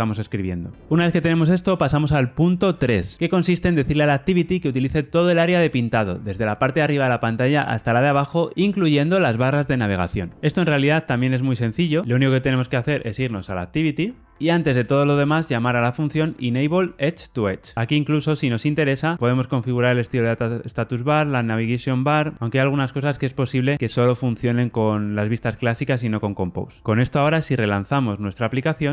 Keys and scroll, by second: 16.7 Return, 18.0 super+b, 22.3 alt+super+[, 27.6 ctrl+r.